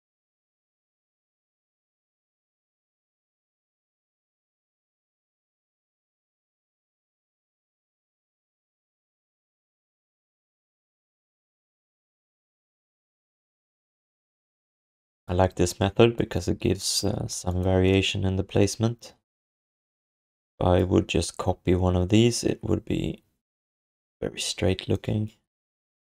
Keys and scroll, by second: 17.2 q.